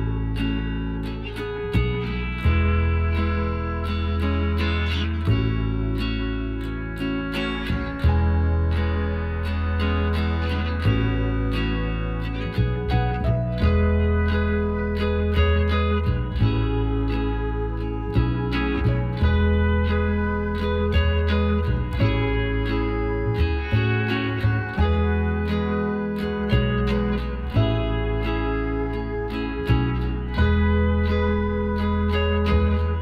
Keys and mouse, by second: 0.1 s, 1.7-4.5 middle drag, 2.6 a, 4.9 middle click, 5.4-7.9 middle drag, 7.9-9.8 drag, 8.8-10.5 right drag, 10.2-12.0 drag, 14.4-18.6 middle drag, 18.6 g, 20.0 a, 20.9 a, 23.1 ctrl+z, 23.6 ctrl+z, 24.0 ctrl+z, 24.7 a, 25.1-26.6 middle drag, 27.0-29.0 right drag, 29.0-30.5 middle drag, 29.7-31.6 right drag, 31.4-33.0 drag.